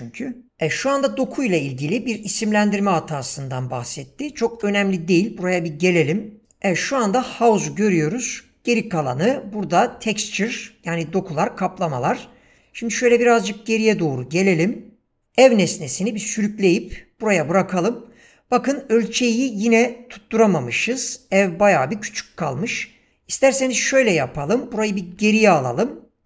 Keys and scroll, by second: 4.5 ctrl+space, 15.2 ctrl+space, 25.2 ctrl+z.